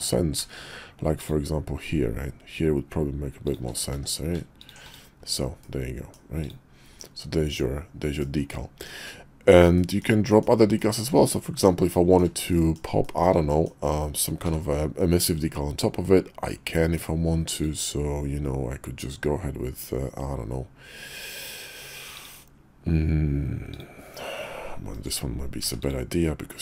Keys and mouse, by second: 1.2 ctrl+shift+d, 4.7 alt+d, 5.6-6.1 middle drag, 6.4 click, 7.0-8.2 middle drag, 8.9 middle click, 9.8 shift+middle drag, 10.3 middle click, 10.8 shift+middle drag, 11.2-11.6 middle drag, 11.9 shift+middle click, 12.5 middle click, 13.0 shift+middle click, 13.5 middle click, 24.9 click, 25.6 x.